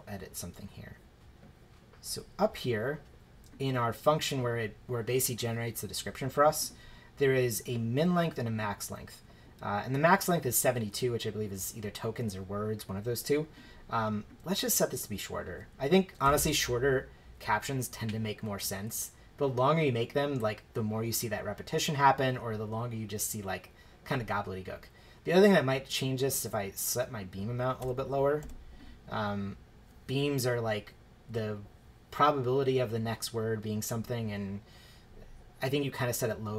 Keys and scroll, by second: 15.9-16.7 typing, 27.8 BackSpace, 28.4 3.